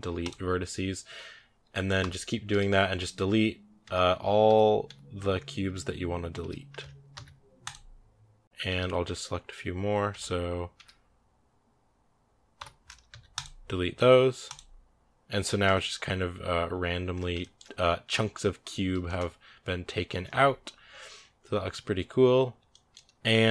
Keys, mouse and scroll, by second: 0.2 x, 1.8 l, 2.3 l, 3.7-6.2 typing, 7.6 x, 8.4 ctrl+z, 8.5 a, 9.9 l, 10.7 l, 12.4 l, 14.4 x, 15.5 Tab, 16.5 scroll down 1, 17.2-20.7 shift+middle drag, 20.7 a, 21.7-22.5 scroll down 1, 22.5-23.5 shift+middle drag.